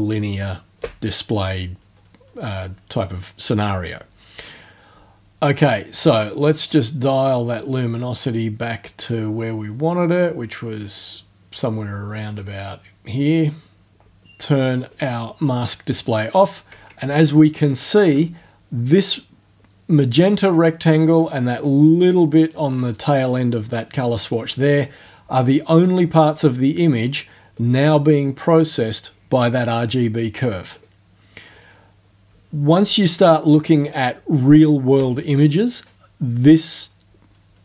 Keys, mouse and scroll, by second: 5.9-14.0 drag, 14.8 click, 17.1-17.8 ctrl+alt+scroll up 2, 26.3 click, 27.6 click, 29.5 click, 30.8 click.